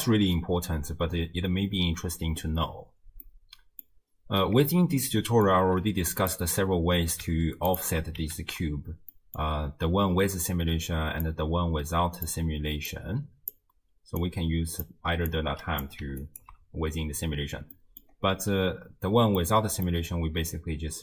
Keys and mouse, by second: 3.3 click, 5.0 click, 5.0 right click, 6.2 click, 7.7 ctrl+click, 8.4 ctrl+x, 9.2 middle click, 11.3-12.4 drag, 12.9 click, 14.2-15.0 drag, 15.3 click, 16.3 ctrl+click, 17.8 middle click, 17.9 click, 19.4 click, 20.5-21.0 drag.